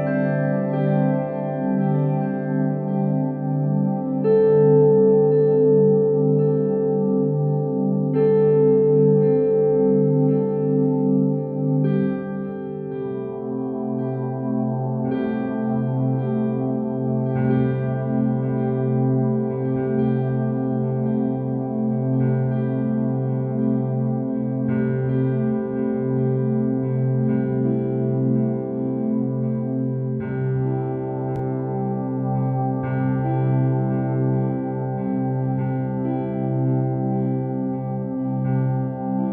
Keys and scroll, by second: 6.6 ctrl+t, 19.7 ctrl+t, 33.3 ctrl+t.